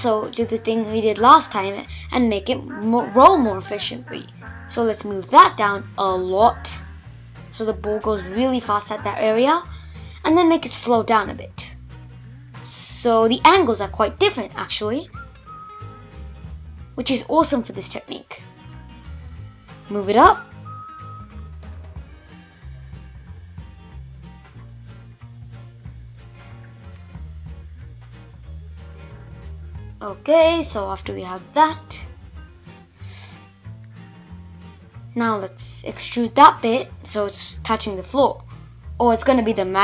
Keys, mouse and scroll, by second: 1.3 alt+z, 1.6 click, 2.9 g, 5.7 middle click, 6.5-7.4 scroll down 1, 7.4 click, 8.7 g, 10.7-13.7 middle drag, 13.7 space, 14.3 space, 14.8 Tab, 16.0 /, 16.4-17.8 middle drag, 17.8 alt+z, 18.2 click, 20.2 click, 21.3 shift+click, 21.7 scroll up 1, 21.7-23.8 middle drag, 23.8 g, 26.9-29.1 middle drag, 29.1-29.5 scroll down 2, 29.5-30.5 middle drag, 30.5 g, 32.5-33.6 middle drag, 33.6 click, 34.5 Tab, 34.9-36.3 middle drag, 36.3 alt+z, 36.5 click, 38.1 alt+z, 38.4-39.6 middle drag, 39.6 g.